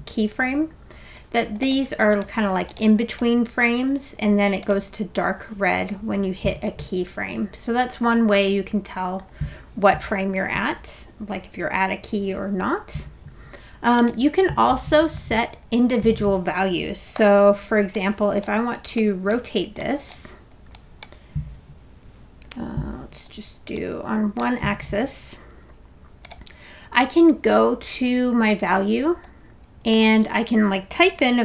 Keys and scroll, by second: 17.1 e, 24.5 super+z, 31.0-31.4 typing.